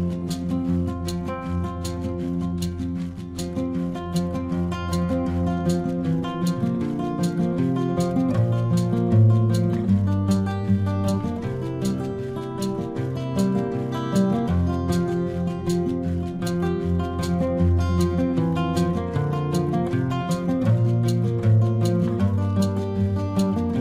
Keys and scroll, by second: 4.2 ctrl+-, 5.3 ctrl+=, 7.0 space, 8.4 space, 12.8 space, 17.1 space, 19.1 space, 20.4 ctrl+-, 20.8 space, 21.4 ctrl+-.